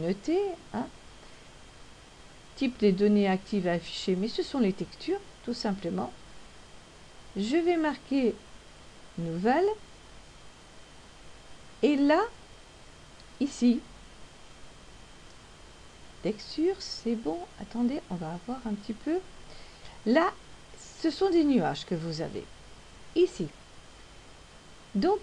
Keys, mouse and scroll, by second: 11.9 click, 15.1 click, 21.0 scroll down 1, 24.9 click.